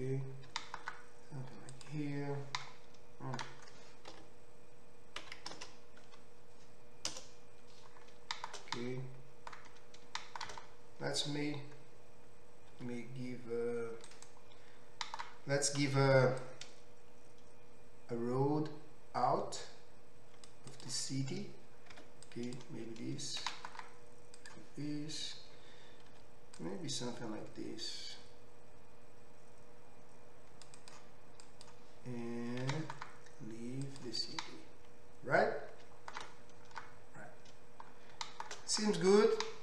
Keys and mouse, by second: 0.5 g, 1.8-14.2 middle drag, 5.2 KP_5, 5.5 KP_Decimal, 5.5 KP_0, 7.2 KP_0, 12.7 ctrl+t, 14.2-15.5 right drag, 15.8 ctrl+r, 22.0 2, 22.2 click, 23.5 e, 24.5-28.4 drag, 26.2 ctrl+r, 28.4-31.5 right drag, 32.7 e, 34.0-35.5 middle drag, 35.5-39.6 right drag.